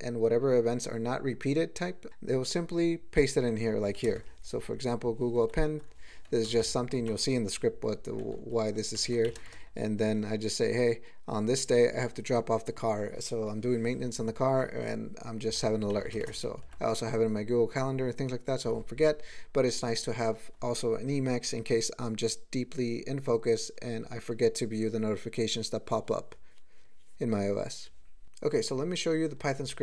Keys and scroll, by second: 4.0 ctrl+a, 4.1 ctrl+space, 4.2 ctrl+e, 5.4 ctrl+g, 6.3 ctrl+p, 6.5 ctrl+space, 6.6 ctrl+e, 8.3 ctrl+g, 9.0 ctrl+n, 9.2 alt+m, 9.4 ctrl+space, 9.4 ctrl+e, 11.6 ctrl+g, 15.9 alt+m, 16.2 ctrl+space, 16.2 ctrl+e, 16.4 ctrl+g.